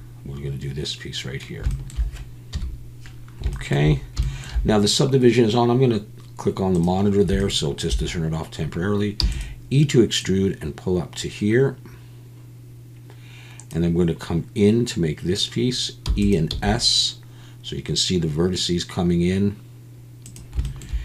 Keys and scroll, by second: 2.5 KP_1, 9.2 e, 16.0 e, 16.5 s.